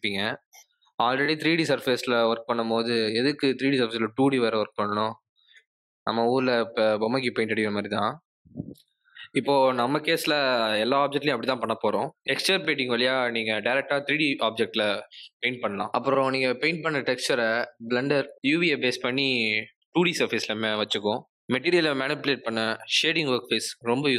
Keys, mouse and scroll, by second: 21.4 click.